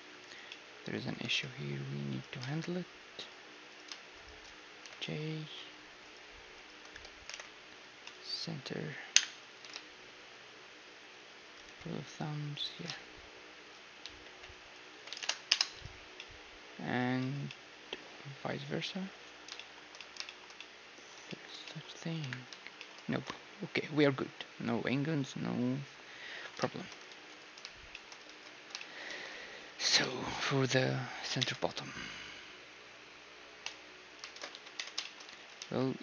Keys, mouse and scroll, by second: 0.5-2.3 drag, 1.2 g, 2.4 ctrl+Tab, 3.7-8.4 right drag, 4.8 j, 5.0-7.2 drag, 5.4 a, 7.3 alt+m, 9.1 KP_1, 9.5 g, 11.7 b, 12.7-14.7 right drag, 12.9 g, 14.0 z, 14.2 b, 14.9 s, 15.7 z, 16.2-25.4 middle drag, 17.2 a, 22.2 KP_1, 27.1 ctrl+s, 27.9-33.7 middle drag, 28.8 ctrl+s, 29.1 shift+space, 29.8 z, 31.4 Tab, 33.7-35.4 drag, 34.3 shift+space, 34.5 z, 34.8 Tab, 35.0-36.0 middle drag, 35.3 z, 35.6 ctrl+r.